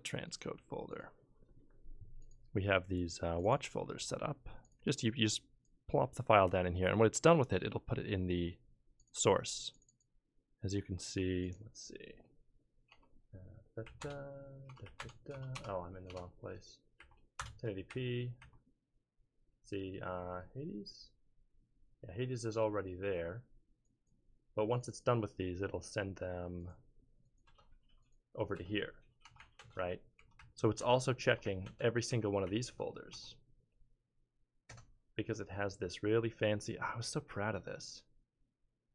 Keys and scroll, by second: 12.9 BackSpace, 13.8 Down, 14.0 Return, 14.7 BackSpace, 14.8 Down, 15.0 Return, 15.3 BackSpace, 15.5 BackSpace, 16.1 BackSpace, 17.0 Down, 17.4 Return, 17.9 Down, 18.4 Down, 27.5 Return, 28.5 Return, 29.2-33.1 typing, 29.4 Down, 29.6 Return, 30.4 Down, 30.8 Return, 31.4 Down, 31.6 Return, 32.5 Down, 32.7 Return.